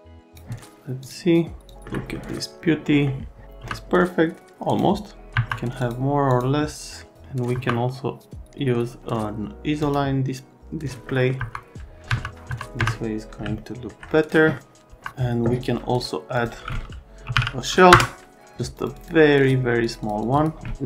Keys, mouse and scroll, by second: 0.3 click, 1.7 click, 1.8 alt+middle click, 2.1 middle click, 2.8 middle click, 3.6 F3, 4.6 click, 5.3 F3, 5.8 click, 6.3 click, 7.5 F3, 9.8 click, 11.0 middle click, 11.4 F3, 12.1 F3, 12.5 F3, 12.8 F3, 13.5 alt+middle click, 14.3 middle click, 14.9 F3, 16.3 click, 17.0-17.8 typing, 17.9 Return, 18.7 click, 18.9 click, 19.4 click, 19.8 click, 20.0 click, 20.2 click, 20.4 right click.